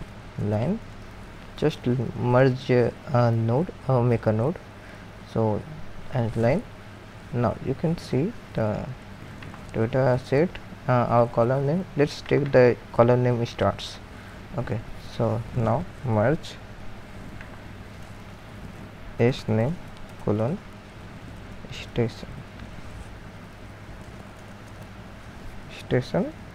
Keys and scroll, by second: 0.0-3.0 typing, 4.3 typing, 18.5-20.1 typing, 21.3-22.7 typing, 23.8-25.2 typing.